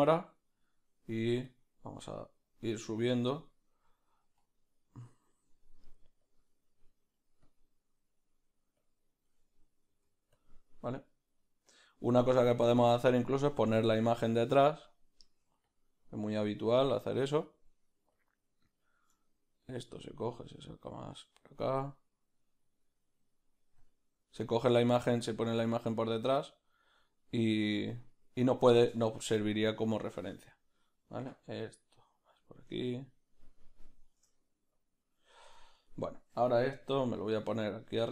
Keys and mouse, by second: 0.0 ctrl+middle click, 19.2 click, 19.2 ctrl+middle click, 19.9 click, 25.6 ctrl+middle click, 30.6 click, 33.0 shift+click, 34.9 click, 35.6 Tab, 35.6 click, 35.9 right click, 36.8 g.